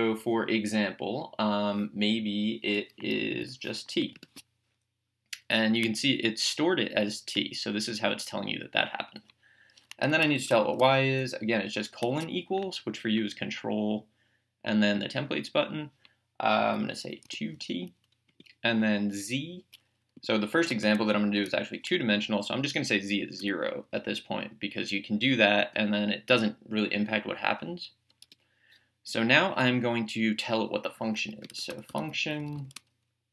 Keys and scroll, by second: 3.4 t, 4.2 Return, 10.2 y, 11.9 =, 17.0-18.0 typing, 18.3 Return, 20.2 z, 21.4 =, 23.4 0, 25.6 Return, 28.2 BackSpace, 31.7-33.3 typing.